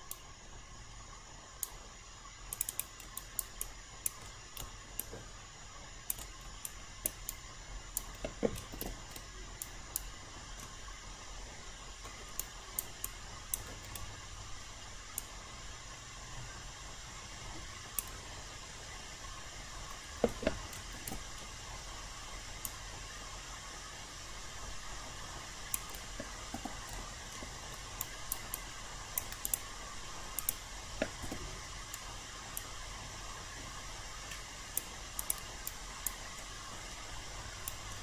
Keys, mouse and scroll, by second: 2.5 click, 3.1 alt+right click, 5.0 ctrl+click, 6.6 alt+click, 7.2 alt+right click, 8.7 ctrl+e, 9.6 alt+right click.